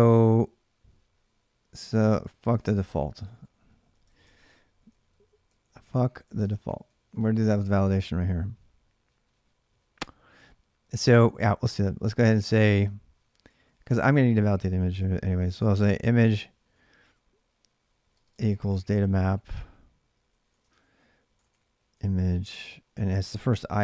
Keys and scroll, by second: 1.2-7.6 typing, 3.0 ctrl+[, 3.1 ctrl+j, 11.4-13.4 typing, 14.9-23.8 typing.